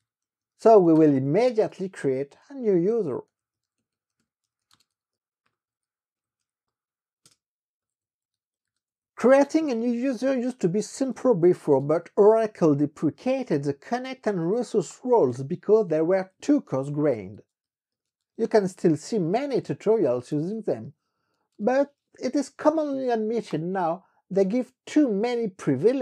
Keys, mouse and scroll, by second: 0.0-23.1 typing, 7.4 Return, 23.7 KP_Enter.